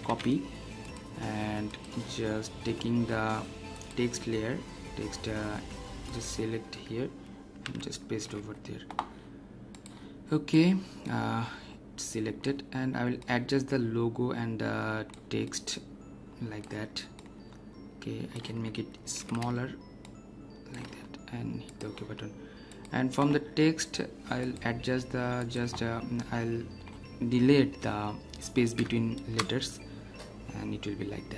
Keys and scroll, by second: 0.0 ctrl+c, 7.6 ctrl+v, 19.1 ctrl+t, 29.3 Return.